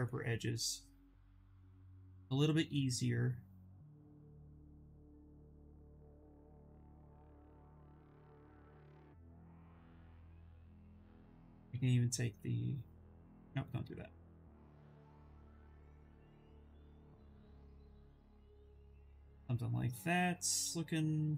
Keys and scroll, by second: 5.2 ctrl+z, 5.4 ctrl+z, 5.7 ctrl+z, 6.0 ctrl+z, 6.3 ctrl+z, 10.7-12.0 typing, 14.1-15.8 typing.